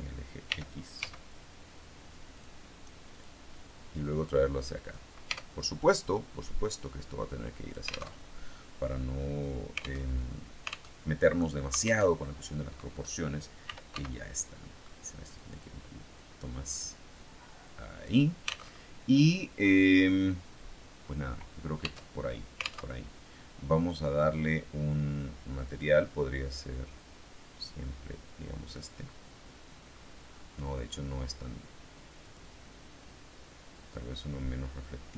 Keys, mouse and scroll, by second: 0.4 r, 1.2 x, 2.2 click, 3.1-5.0 drag, 5.2 Tab, 6.3-8.1 drag, 8.1 alt+Tab, 10.0 alt+Tab, 10.8 alt+Tab, 12.0 alt+Tab, 13.3-14.3 typing, 15.2 click, 16.3-18.1 drag, 18.7 alt+Tab, 21.7 Tab, 22.8 alt+Tab, 25.6 click, 28.6 click, 29.3-30.6 scroll down 1, 32.1 click.